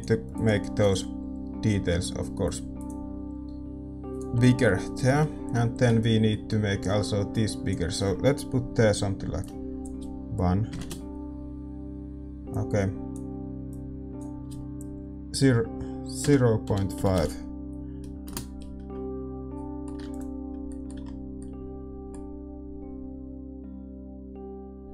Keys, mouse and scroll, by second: 5.7-9.0 middle drag.